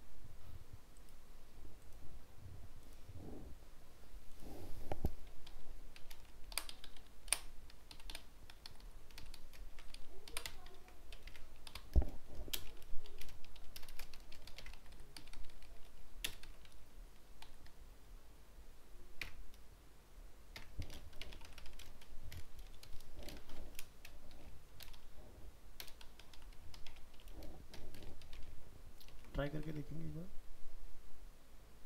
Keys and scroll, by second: 9.7 ctrl+c, 10.8 ctrl+v, 28.4 ctrl+s, 29.7 alt+Tab.